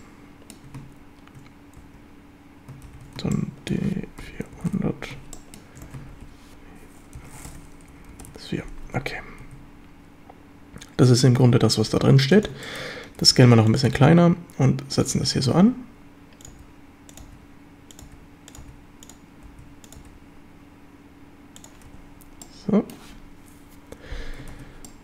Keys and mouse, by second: 1.8 space, 2.9 shift+d, 3.3-3.7 shift+drag, 4.2-6.1 typing, 5.3 shift+drag, 7.5-8.8 typing, 9.4 Tab, 11.8 s, 12.4 click, 12.6 shift+middle click, 13.2 s, 13.7 click, 13.9 g, 15.0 click, 15.6-20.0 typing, 16.5 click, 17.1 click, 18.0 click, 18.5 click, 19.0 click, 19.9 click, 21.6 click, 21.9 z, 22.4-23.0 middle drag, 24.6 ctrl+s, 24.9-25.0 drag.